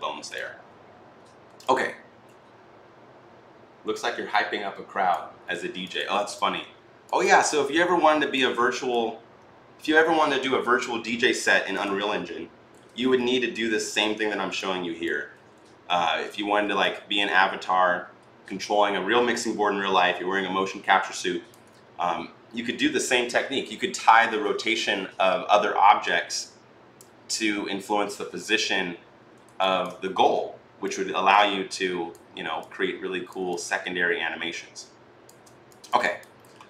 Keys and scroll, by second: 13.0 r, 15.9 ctrl+z, 28.2 e, 29.9 e.